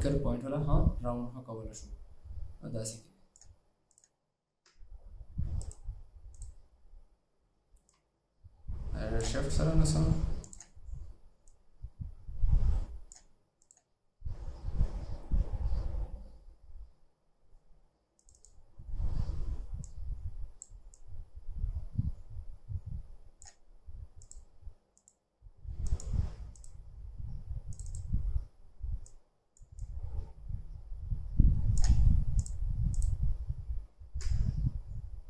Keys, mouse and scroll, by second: 4.7 alt+scroll down 1, 5.7 right click, 8.0 right click, 18.5 double click, 28.0 double click, 34.3 alt+scroll down 1.